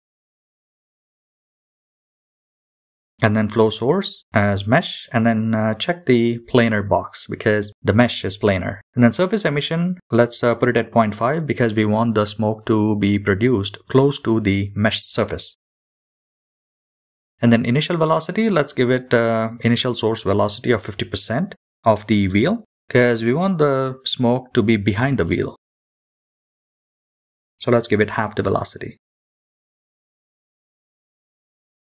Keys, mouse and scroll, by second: 2.5 click, 3.0 scroll down 2, 5.8 click, 5.8 scroll down 1, 8.5-13.8 drag, 16.3-17.2 scroll down 2, 17.2 click, 20.7-24.0 drag, 28.1-29.6 scroll down 3, 29.6-30.2 scroll up 1, 30.2-31.5 scroll up 7.